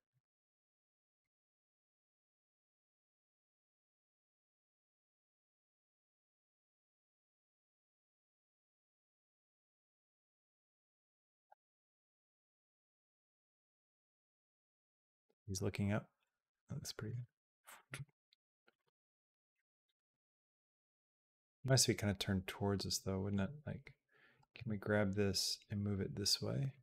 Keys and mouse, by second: 0.0-1.0 drag, 3.1 g, 6.9 g, 8.9 click, 9.8 g, 11.7 g, 13.2-16.9 drag, 17.0 space, 17.8 space, 18.5 click, 18.7 space, 20.0 space, 20.4-23.1 drag, 24.2 g.